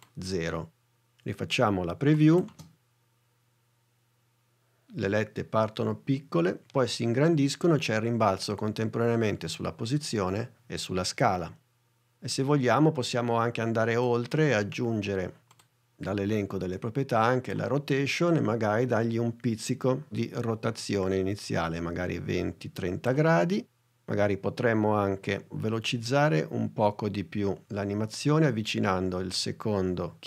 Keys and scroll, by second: 2.5 space, 12.6 space.